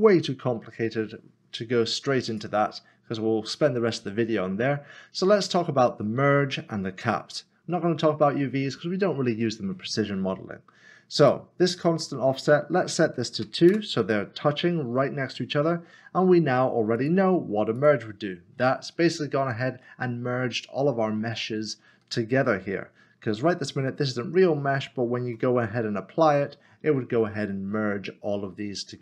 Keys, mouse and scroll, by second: 2.3 click, 11.2 click, 13.4 2, 13.7 Return, 17.0 click, 21.7 scroll up 1, 22.6 scroll down 1.